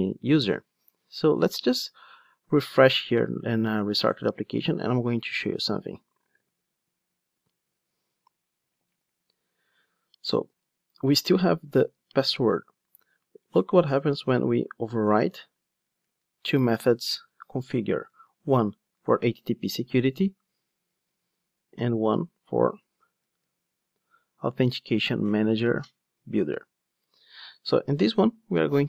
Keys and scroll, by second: 3.1 ctrl+d, 15.0 ctrl+o, 15.8 Down, 21.8 ctrl+o, 23.0 Down, 25.3 Up.